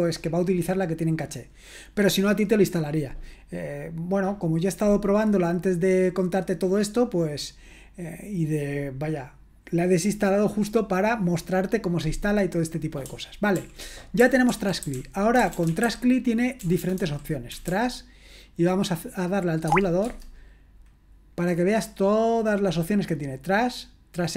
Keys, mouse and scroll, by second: 13.6 ctrl+l, 14.0-18.2 typing, 19.7 Tab, 20.1 typing.